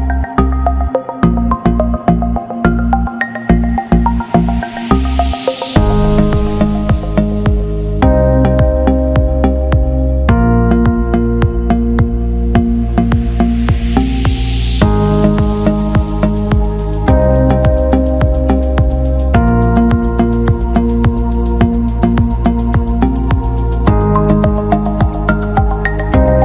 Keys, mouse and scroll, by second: 3.3 click, 3.4 click, 3.6 click, 4.4 click, 6.7 click, 13.4 click, 16.7 click, 19.2 click, 22.3 click, 24.6 click.